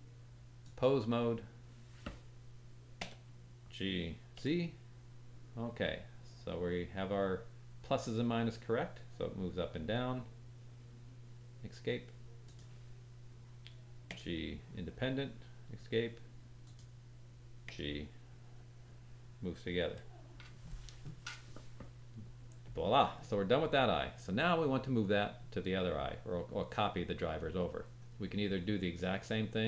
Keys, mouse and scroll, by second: 3.0 g, 5.6-7.2 drag, 5.6-7.2 middle drag, 5.6-7.2 right drag, 7.3-7.9 drag, 7.3-7.9 middle drag, 7.3-7.9 right drag, 8.8-12.6 drag, 8.8-12.4 middle drag, 8.8-12.4 right drag, 14.1 g, 16.6 click, 17.6 g, 28.0-28.5 scroll up 2, 28.5-29.1 scroll down 1, 29.1 middle click.